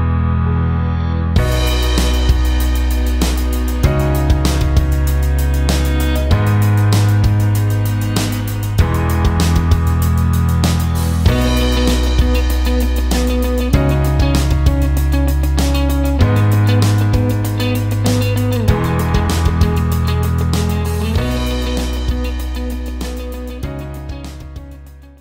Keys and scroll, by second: 7.1 space, 8.9 shift+F2, 9.8 F9.